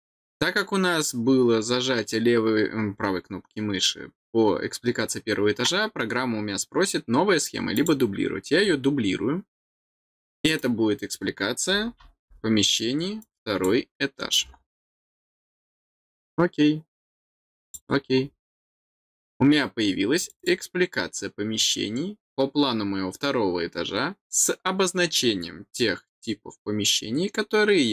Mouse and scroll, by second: 7.7 click, 10.5 click, 13.2 click, 15.9 click, 17.6 click, 20.1 click, 20.3 click.